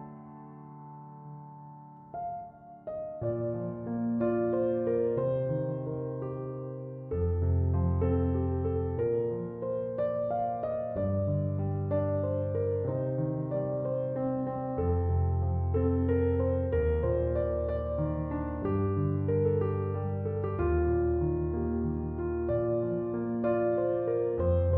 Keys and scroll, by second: 1.0-2.6 typing, 19.8 4, 20.1 Return.